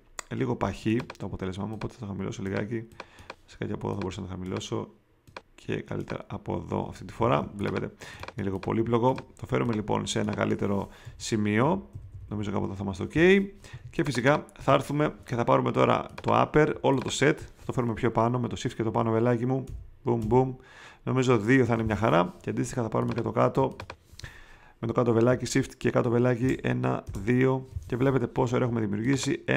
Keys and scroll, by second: 7.3 space, 9.4 space, 11.0 v, 13.7 space, 19.6 shift+Up, 26.4 shift+Down.